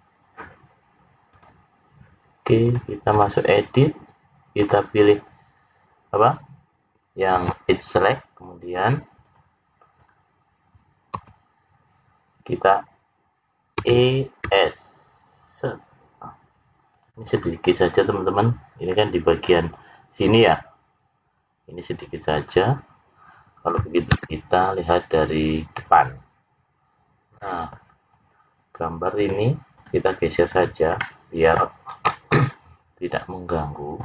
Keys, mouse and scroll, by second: 1.2 click, 2.7 click, 4.6 click, 9.2 click, 9.9 click, 11.1 l, 13.8 e, 17.3 scroll up 6, 22.3-23.1 scroll down 2, 23.1-24.0 scroll down 2, 27.3 middle click, 29.1 click, 30.4 click, 30.9 middle click, 32.4 click.